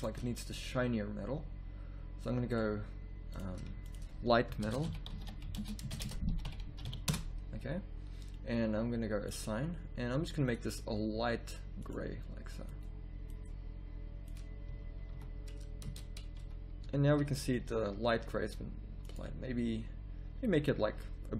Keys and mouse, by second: 14.7 z, 15.9 Tab, 15.9 a, 16.4 z, 16.9 a.